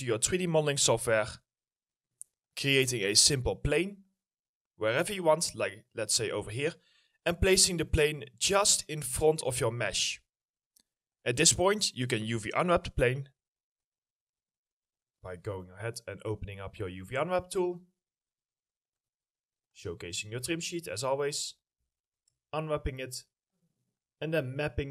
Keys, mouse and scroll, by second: 0.4 middle click, 6.4 w, 6.8 scroll, 6.9 scroll up 1, 7.1 alt+middle click, 7.8-8.9 alt+scroll up 1, 10.0 alt+middle click, 20.5 middle click, 22.0 middle click, 22.2-22.7 scroll down 1, 23.0 ctrl+click, 24.6-24.9 scroll up 1.